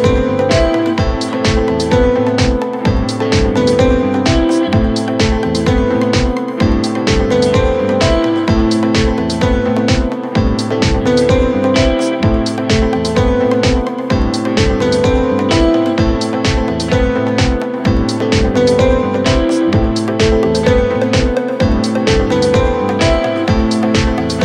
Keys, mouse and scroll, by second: 2.2 middle click, 2.4 middle click, 2.6 scroll up 6, 2.8 middle click, 3.3-3.6 scroll down 3, 5.2 middle click, 5.7 scroll up 4, 5.9 middle click, 7.3 scroll down 11, 8.0 scroll down 4, 8.1 middle click, 8.5 scroll up 3, 8.6 middle click, 9.5 middle click, 10.1 scroll up 3, 10.3-10.7 scroll down 6, 11.0 scroll up 3, 11.2 scroll down 4, 12.0 space, 12.3-12.8 scroll up 3, 12.9 shift+click, 13.1 right click, 14.6 typing, 16.4-17.2 typing, 17.6-18.6 scroll down 4, 19.8-20.2 typing, 20.0 Return, 20.7-21.3 scroll up 8, 21.5 middle click, 22.0 double click, 22.4 typing.